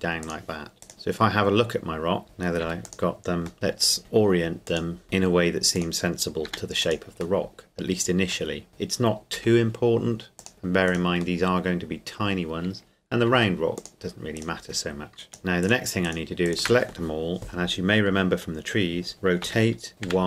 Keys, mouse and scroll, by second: 0.2 click, 0.8 right click, 0.9 middle click, 2.2 click, 2.7 r, 2.9 click, 3.5 middle click, 4.0 r, 4.7 click, 5.0 r, 5.7 click, 6.5 g, 6.8 click, 7.4 middle click, 8.7 click, 9.3 g, 10.4 click, 10.9 right click, 11.4 middle click, 13.3 r, 13.8 click, 14.4 right click, 15.3 shift+right click, 19.4 r, 20.0 y.